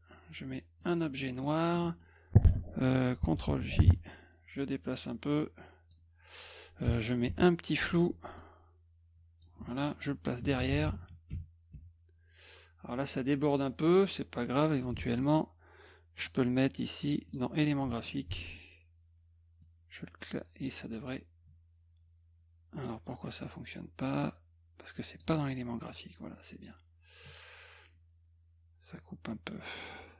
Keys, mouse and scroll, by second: 0.8 click, 1.2 middle drag, 3.5 ctrl+j, 4.9-5.9 drag, 7.3 ctrl+shift+f, 8.4-9.4 drag, 9.6 F1, 15.0 ctrl+x, 16.2 click, 17.3 click, 18.3 ctrl+alt+v, 19.6-20.6 drag, 24.0-25.2 drag.